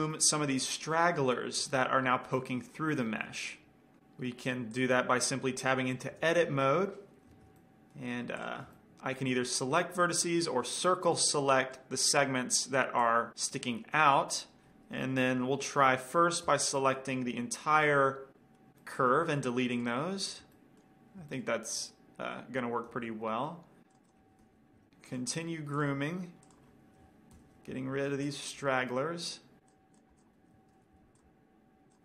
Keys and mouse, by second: 5.2-5.8 drag, 6.8 Tab, 8.8-10.8 drag, 8.8-10.5 right drag, 10.5 c, 10.8 middle click, 14.9-16.7 right drag, 17.0 ctrl+l, 18.0 middle click, 19.5-21.0 middle drag, 19.7 x, 23.4 c, 24.6 ctrl+l, 25.0 x, 26.3-28.6 drag, 27.8 ctrl+l, 28.2 x, 29.3 middle click, 30.0-31.1 drag, 30.9 ctrl+l, 31.3 x.